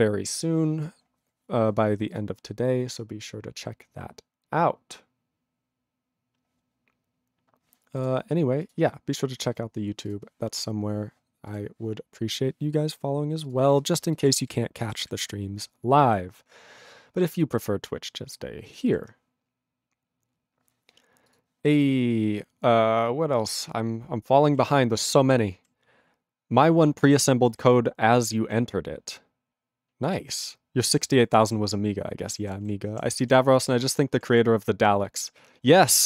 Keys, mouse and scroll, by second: 0.6 ctrl+Return, 13.5 click, 13.6 click, 13.9 ctrl+space, 14.3 ctrl+alt+b, 14.4 ctrl+g, 15.0 ctrl+s, 18.9 ctrl+s.